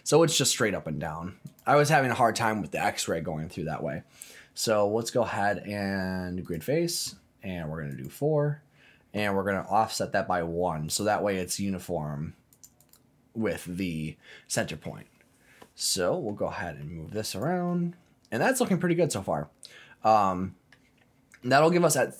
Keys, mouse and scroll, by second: 1.4-6.5 drag, 7.9 click, 10.9 click, 12.5 click, 12.8 click, 15.6 middle click, 16.3-16.8 scroll down 3, 16.8 middle click, 17.3 click, 17.6-18.9 middle drag, 18.9 scroll down 1, 19.1-20.7 middle drag, 21.4 middle click, 21.8-22.1 scroll up 4.